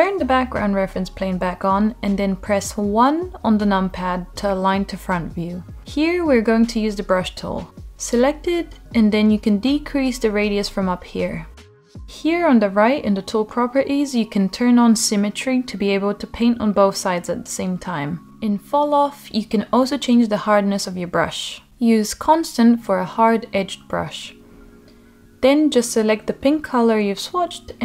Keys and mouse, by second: 1.2 KP_1, 2.6 shift+middle click, 5.1 click, 5.4 ctrl+z, 8.4 click, 11.8-12.6 drag, 13.3 click, 15.6 click, 17.0-18.3 drag, 18.8 click, 19.5-20.6 drag, 21.4 click, 22.4 click, 23.3 middle click, 23.8 middle click, 24.8 right click, 25.1-26.5 drag, 26.5 middle click, 27.2 click.